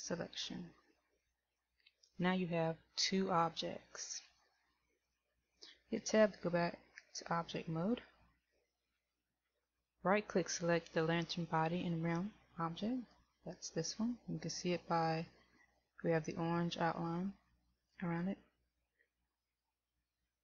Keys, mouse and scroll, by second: 7.3 Tab, 13.2 right click.